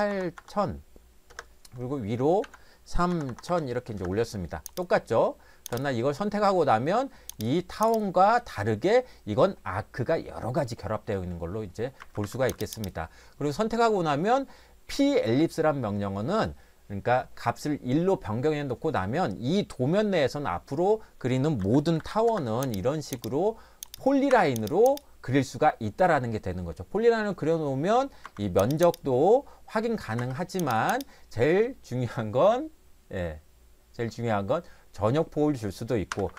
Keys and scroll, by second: 0.0-0.9 typing, 1.3 Return, 2.4-3.6 typing, 4.0 Return, 12.0 Escape, 12.2 Escape, 12.4 Escape, 21.6 e, 22.0 l, 22.3 Return, 24.3 Escape, 28.2 Escape, 30.2 Escape, 36.1 Escape, 36.3 Escape.